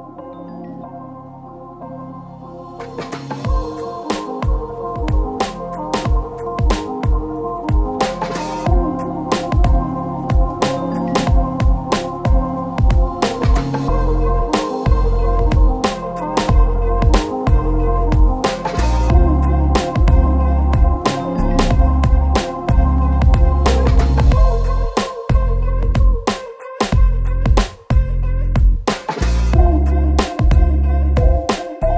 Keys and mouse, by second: 0.4 KP_1, 0.5 shift+middle click, 0.7 shift+d, 1.6 ctrl+m, 1.9 a, 2.6 KP_1, 3.0 shift+d, 3.4 shift+z, 4.7 shift+click, 6.7 shift+click, 6.7 shift+a, 6.9 shift+z, 7.5 shift+middle click, 8.0-8.9 typing, 8.2 shift+middle click, 8.8 shift+middle click, 8.9 shift+middle click, 10.1 shift+z, 10.3 middle click, 11.4-14.5 typing, 11.6 shift+middle click, 12.9 middle click, 13.2 shift+middle click, 13.7 shift+middle click, 13.9 middle click, 14.7 shift+click, 16.1 ctrl+s, 16.4 shift+click, 16.6 shift+a, 17.3-18.3 drag, 18.1-20.2 typing, 19.6 click, 20.0 ctrl+a, 20.6 click, 21.1 ctrl+z, 21.5 s, 22.3-23.4 middle drag, 22.7 s, 23.9 s, 25.5 s, 26.0 ctrl+z, 26.1 ctrl+z, 26.3 s, 27.6 s, 28.5 s, 28.6 ctrl+z, 28.6 ctrl+click, 28.7 s, 29.3 s, 29.7 middle click, 30.3 KP_Divide, 30.7 ctrl+a, 30.7 ctrl+click, 31.1 Tab, 31.3 Tab, 31.4 shift+click, 31.8 shift+click, 31.9 shift+click.